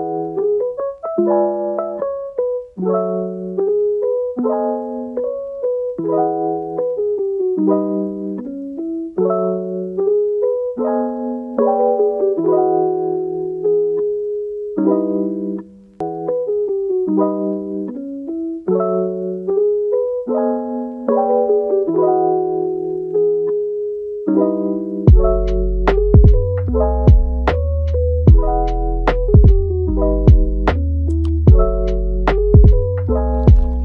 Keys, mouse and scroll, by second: 1.0 KP_1, 3.2-3.9 shift+middle drag, 3.9-4.3 scroll up 3, 4.3-4.7 shift+middle drag, 4.7-5.7 scroll down 2, 5.7 g, 7.6-7.9 scroll up 1, 7.9 shift+middle click, 8.4 r, 9.9 r, 10.8 g, 11.7-12.2 scroll up 2, 12.2 r, 14.5 r, 15.9 g, 16.7-17.8 middle drag, 17.8 g, 20.9 middle click, 21.3 r, 22.7-23.5 middle drag, 23.5 g, 25.6-26.0 middle drag, 26.0 g, 26.7-27.1 middle drag, 27.1 g, 27.6 scroll up 1, 27.6-28.3 middle drag, 28.3 r, 29.3-30.2 middle drag, 30.2 r, 31.3-33.8 middle drag.